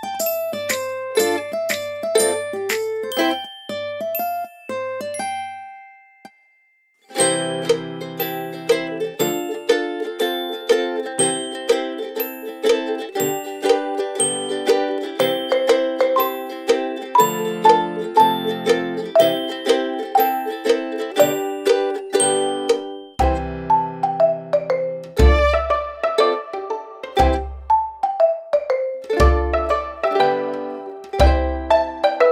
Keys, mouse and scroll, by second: 1.3-8.3 typing, 8.8 ctrl+Return, 11.1 click, 16.1 click, 28.2 click.